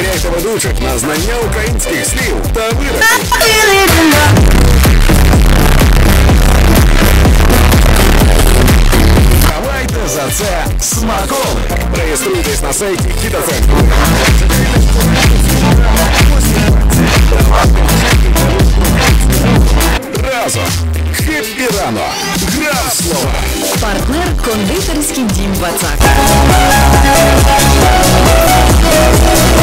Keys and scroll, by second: 9.6 Page_Down, 20.5 Page_Down.